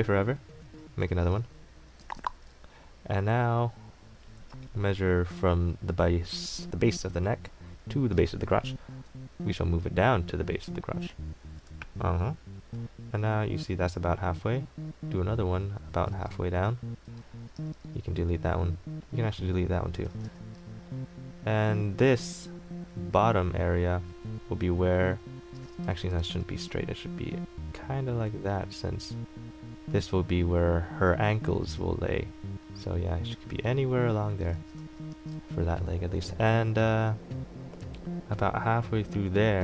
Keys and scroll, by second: 1.9-2.8 typing, 8.9 ctrl+t, 11.7 KP_Enter, 16.3 ctrl+z, 17.7 e, 20.4 a, 26.1 ctrl+z.